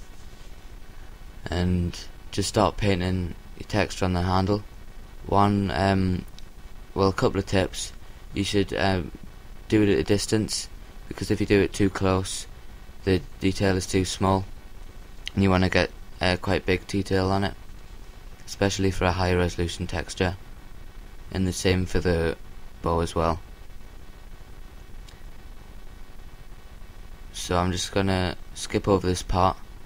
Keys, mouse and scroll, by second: 5.4 KP_7, 8.2-10.9 middle drag, 10.2-12.0 drag, 16.6-18.2 middle drag, 20.6-22.5 drag, 22.8-24.3 drag, 24.8 KP_7, 26.1-27.3 drag, 27.6 click, 29.7-29.8 middle drag.